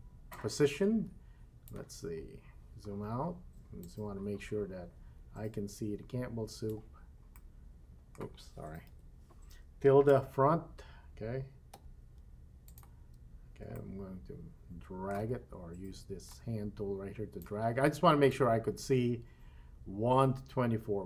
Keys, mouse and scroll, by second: 0.3-1.8 drag, 2.2-2.8 scroll down 4, 3.9-6.8 drag, 7.3-9.0 middle drag, 8.9 KP_1, 10.1 1, 11.7 `, 13.7-15.1 shift+middle drag, 16.3-17.4 drag, 18.3-21.0 drag.